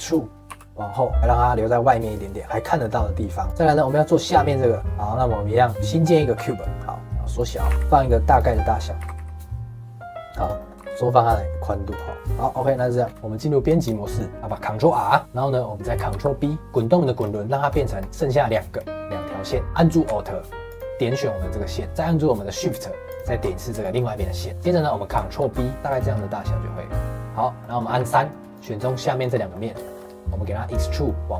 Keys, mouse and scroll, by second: 0.4 e, 3.5-4.8 middle drag, 4.8 shift+a, 5.8 middle click, 6.3 s, 8.5 middle click, 8.9 s, 10.5 middle click, 10.7 g, 12.1 shift+middle click, 12.2 g, 12.3 middle click, 13.0 scroll up 1, 13.1 middle click, 13.1 Tab, 14.0 shift+middle click, 14.2 ctrl+r, 15.2 middle click, 16.1 ctrl+b, 19.6 middle click, 20.6 alt+click, 21.8 alt+click, 23.0 alt+shift+click, 23.7 shift+middle click, 24.6 scroll up 2, 24.7 middle click, 25.3 ctrl+b, 26.1-27.9 middle drag, 27.9 3, 28.5 click, 29.1 shift+click, 29.5 middle click, 30.2 scroll down 1, 30.3-31.3 middle drag.